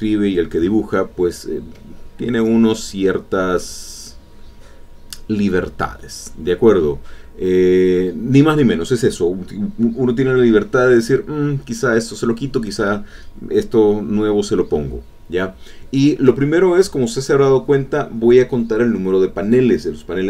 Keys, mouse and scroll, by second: 0.1 click, 2.6-4.1 shift+drag, 5.4 shift+click, 6.8-8.3 shift+drag, 14.2 alt+Tab, 17.0 alt+Tab, 19.9 alt+Tab.